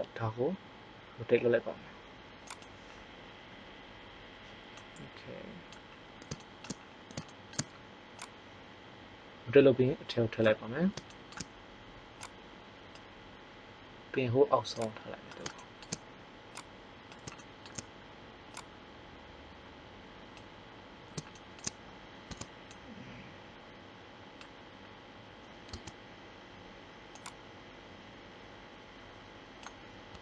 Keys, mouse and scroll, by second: 4.8 middle click, 8.2 click, 12.2 click, 18.7-20.3 drag, 20.8-22.0 middle drag, 22.2 Tab, 25.7 Tab, 30.1 Tab.